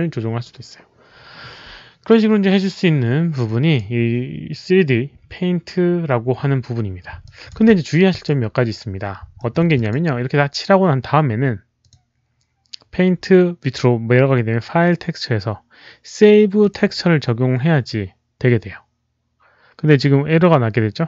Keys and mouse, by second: 2.8 alt+click, 3.4 alt+click, 6.0 click, 7.1 alt+click, 7.6 w, 8.1 alt+click, 9.3 alt+middle click, 9.6 click, 9.8 w, 11.7 click, 16.5 alt+click, 17.9 click, 17.9 alt+middle click, 17.9 w.